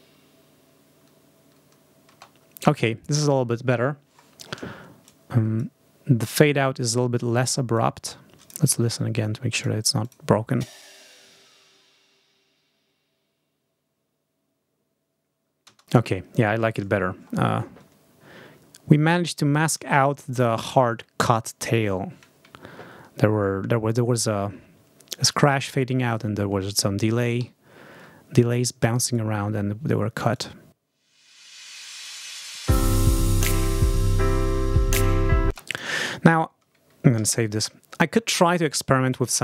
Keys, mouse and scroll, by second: 2.0 space, 4.9 click, 6.8-7.8 drag, 8.0 click, 8.7 click, 9.4 click, 9.9 scroll up 1, 10.4 space, 15.6 space, 17.4-17.9 ctrl+scroll down 2, 18.5-19.2 ctrl+scroll up 4, 22.6 ctrl+scroll down 2, 24.0 ctrl+scroll up 2, 27.3 Home, 28.9 right click, 30.2 click, 33.5-33.9 ctrl+scroll down 2, 35.3 space, 35.6 scroll up 1, 37.0 ctrl+s.